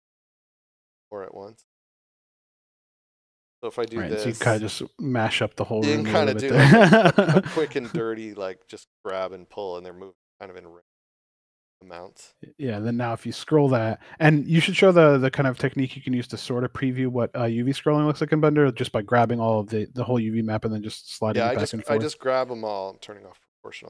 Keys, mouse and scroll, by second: 7.9 scroll down 1, 11.8 click, 12.5 middle click, 15.2 a, 18.0 shift+middle click, 18.6 middle click, 19.4 scroll down 1, 20.3 scroll up 1, 22.0 click, 22.7 scroll up 1.